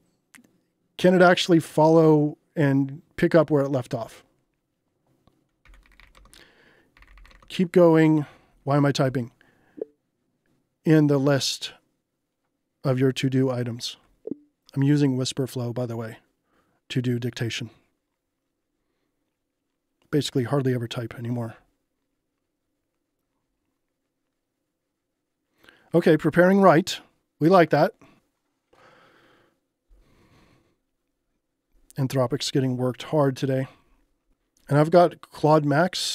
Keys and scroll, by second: 5.4-7.8 typing.